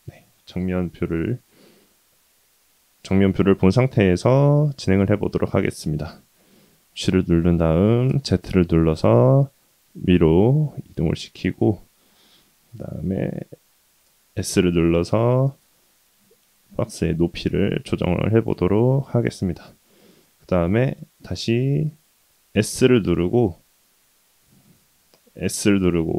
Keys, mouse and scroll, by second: 1.3 scroll down 1, 1.4-3.7 scroll down 1, 5.8 shift+middle click, 6.7 g, 24.5-25.0 middle drag, 25.5 s.